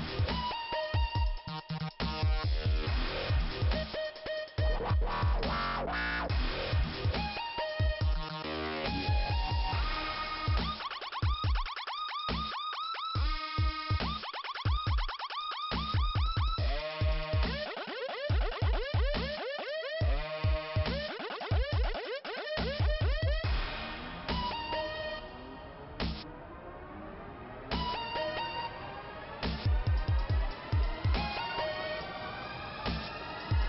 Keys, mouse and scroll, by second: 1.5 click, 2.3-2.9 scroll up 1, 2.9 click, 3.1 double click, 4.9 click, 5.2 double click, 9.4 click, 9.6 click, 9.8 double click, 10.3 click, 10.5 double click, 10.6 click, 10.9 double click, 15.1 scroll down 2, 16.2 scroll up 2, 18.5 click, 18.6 click, 18.7 double click, 24.4 click, 24.5 click, 29.3 click, 29.5 click, 31.6 click, 31.7 click.